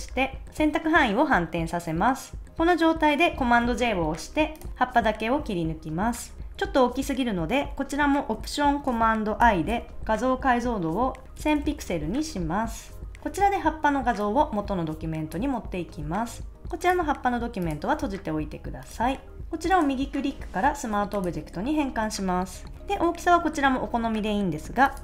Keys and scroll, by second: 3.6 super+j, 11.1-12.0 typing.